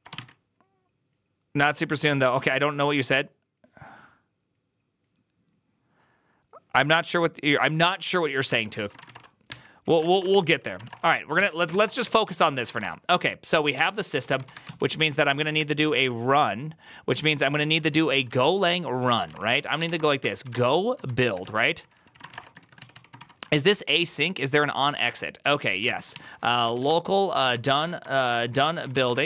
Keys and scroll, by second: 0.0-0.5 typing, 1.9 ctrl+h, 8.6-23.5 typing, 9.7 ctrl+c, 10.1 Return, 10.2 ctrl+n, 11.2 ctrl+t, 11.4 ctrl+c, 11.9 ctrl+n, 12.1 ctrl+c, 15.4 ctrl+n, 17.7 ctrl+c, 18.9 ctrl+c, 24.9 ctrl+c, 25.8-29.2 typing.